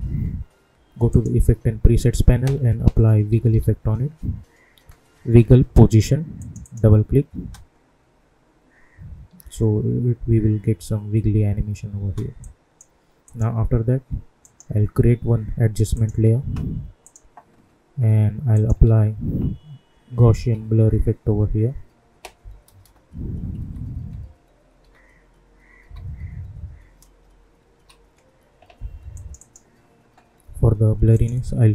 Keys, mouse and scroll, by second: 1.0 click, 2.9-3.9 typing, 6.3 click, 7.3 space, 11.9 space, 12.3 click, 14.4 right click, 15.9 click, 18.8 ctrl+a, 20.3-20.7 typing, 23.3-26.3 typing, 27.4-28.2 typing, 29.1 click.